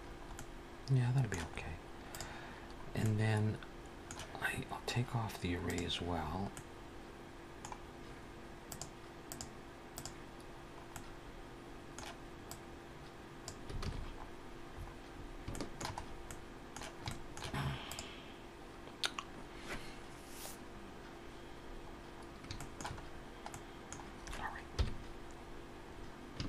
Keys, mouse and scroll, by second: 0.2 middle click, 1.3-1.8 scroll up 2, 1.8 click, 2.4-2.8 scroll down 2, 2.8 middle click, 5.5 click, 6.0-6.3 scroll up 3, 6.4 middle click, 8.5 click, 10.4-10.7 scroll down 2, 10.7 middle click, 12.3 click, 13.8 alt+a, 13.8-14.2 scroll down 3, 14.6-15.3 scroll up 5, 15.3 shift+middle click, 15.8-16.1 scroll up 2, 16.1 middle click, 16.9 shift+middle click, 17.7 click, 21.7-22.1 scroll down 2, 22.4 shift+middle click, 22.9-23.3 scroll down 2, 23.3 middle click, 24.6 KP_1, 25.7 scroll up 1.